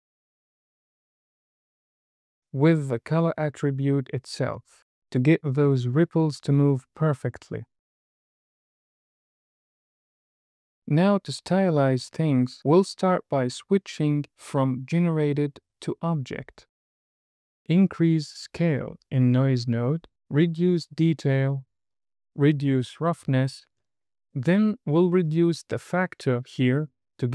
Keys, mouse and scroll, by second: 0.7 middle click, 5.0 click, 8.0 space, 12.6-13.2 scroll up 3, 13.2 middle click, 15.4 click, 17.5 middle click, 18.1-19.4 drag, 20.4-21.7 drag, 22.2 click, 24.2 scroll up 2, 24.6-27.3 drag.